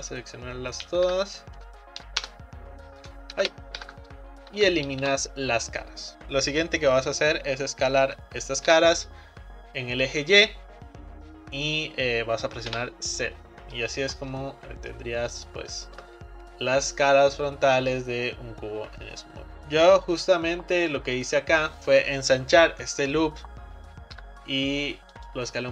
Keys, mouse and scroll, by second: 1.1 Delete, 3.4 ctrl+z, 3.8 Delete, 4.6 Down, 8.0 s, 15.0 middle click, 15.5-15.8 scroll up 2, 15.8-18.9 shift+middle drag, 24.2 s.